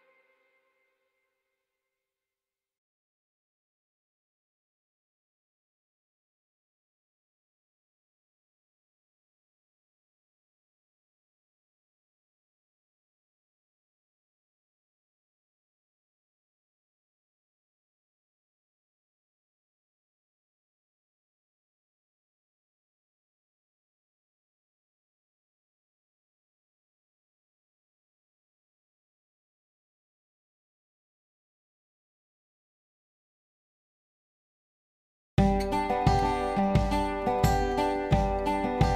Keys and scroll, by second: 18.3-19.1 typing, 24.3-25.1 typing, 31.0 typing, 31.3 Return.